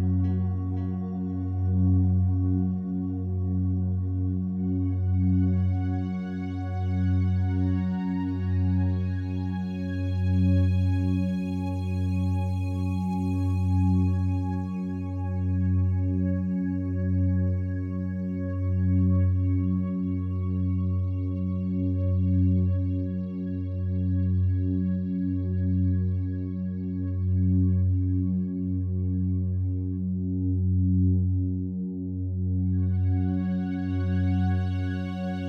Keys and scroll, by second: 3.5 BackSpace, 4.3 6, 4.6 Return, 10.2 c, 10.3 o.